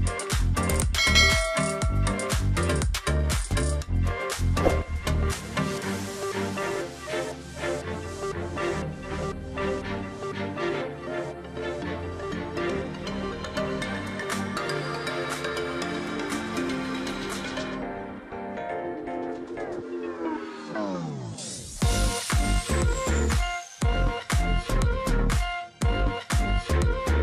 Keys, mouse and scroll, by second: 0.7 space, 1.3 space, 2.1 space, 3.0 space, 3.2 ctrl+z, 4.2 space, 6.5 ctrl+click, 6.7-7.1 alt+scroll down 1, 16.7 shift+click, 18.6 alt+click, 19.4-20.7 scroll down 2, 21.0 double click, 21.3 alt+scroll down 1, 22.3 alt+scroll up 1, 22.8 space, 23.6 space, 26.3 ctrl+z.